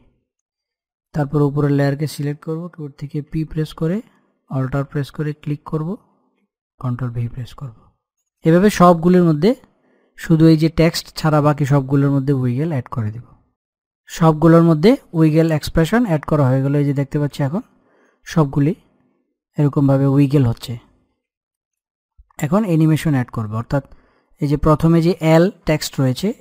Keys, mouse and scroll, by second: 1.0 click, 3.3 p, 5.3 alt+click, 7.2 ctrl+v, 8.1 click, 16.1-21.9 drag, 21.9-23.1 scroll down 1, 23.1 click.